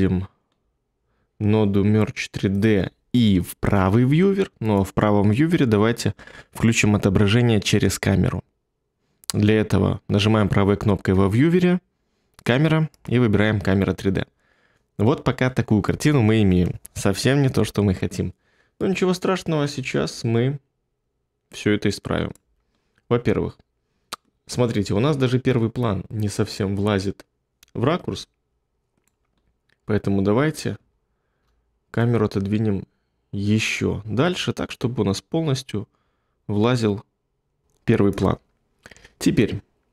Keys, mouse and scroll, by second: 3.6 2, 30.9 ctrl+middle click.